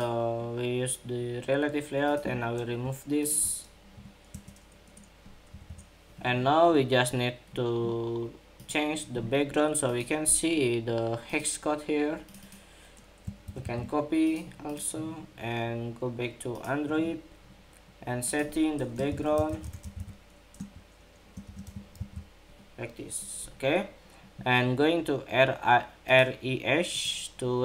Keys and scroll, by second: 13.2 super+c, 21.7 super+v.